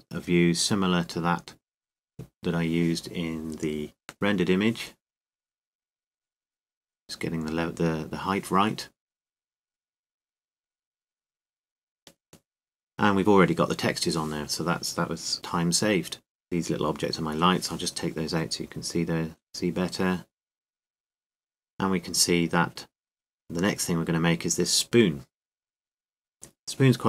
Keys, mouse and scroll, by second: 0.0-2.3 middle drag, 2.6-4.4 drag, 5.5-7.3 middle drag, 7.5-10.3 drag, 8.8 middle click, 10.4 middle click, 15.5 click, 18.5-20.1 drag, 20.1-21.5 middle drag.